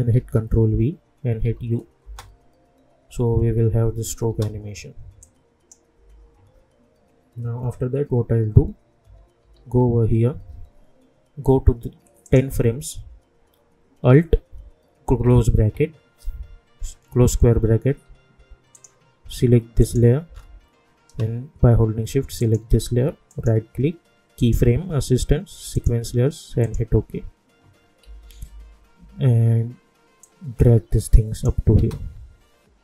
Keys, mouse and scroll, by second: 0.1 ctrl+v, 1.4 u, 2.0 space, 4.2 space, 5.2 click, 5.9 u, 9.0 =, 9.4 =, 12.2 click, 15.0 alt+], 18.7 click, 20.4-21.2 scroll up 1, 22.4 shift+click, 23.3 right click, 24.4 click, 28.0 -, 28.2 -, 28.4 -, 28.9 -, 30.2-31.8 drag, 31.8 space.